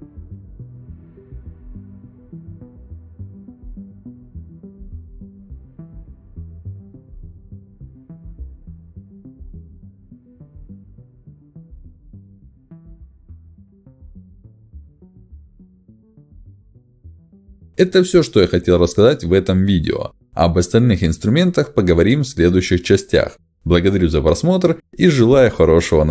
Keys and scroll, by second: 1.0 space, 2.3 ctrl+z, 4.9 ctrl+alt+x, 11.2 ctrl+shift+x, 14.6 space, 15.9 ctrl+alt+x, 19.1 Escape.